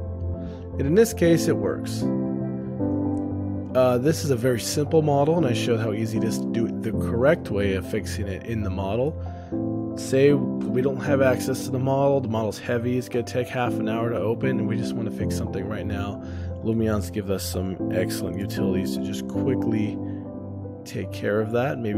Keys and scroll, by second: 9.6 ctrl+alt+o, 15.5 shift+space, 17.1 ctrl+alt+o, 18.2-19.0 typing, 21.2 shift+space.